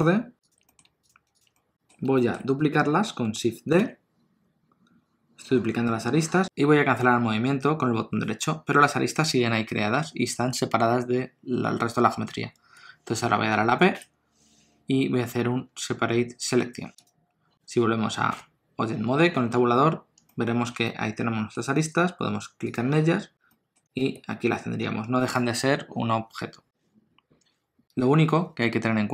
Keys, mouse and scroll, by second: 0.8 middle click, 1.1 shift+click, 1.6 middle click, 2.2 shift+middle click, 3.8 shift+d, 13.9 p, 18.3 Tab, 20.2 middle click, 20.9 ctrl+middle click, 22.7 click, 23.5 middle click, 24.0 g.